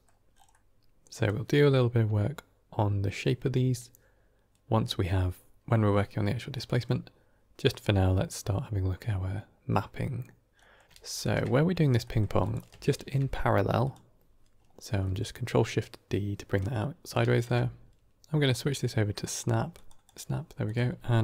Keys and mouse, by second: 0.5 middle click, 0.7 click, 0.7 g, 6.6 middle click, 7.7-8.9 middle drag, 10.6 middle click, 11.1 ctrl+shift+click, 11.9 middle click, 12.3 click, 12.8 ctrl+shift+d, 15.0 middle click, 16.6 middle click, 17.2 ctrl+shift+click, 18.3-19.8 drag, 20.6-21.2 drag.